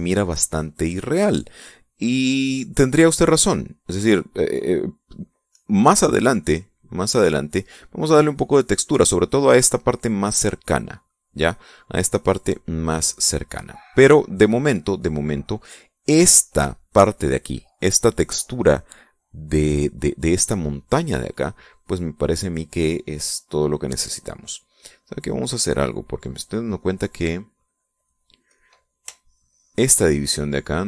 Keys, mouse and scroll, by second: 0.5 click, 1.2 click, 6.2 click, 7.5 click, 12.3 click, 14.1 click, 14.8 click, 15.0 middle click, 15.0 click, 16.1 click, 20.7 click, 24.6-25.9 drag, 26.3 click, 27.3 click, 28.6 click, 29.1 click, 29.7 shift+click.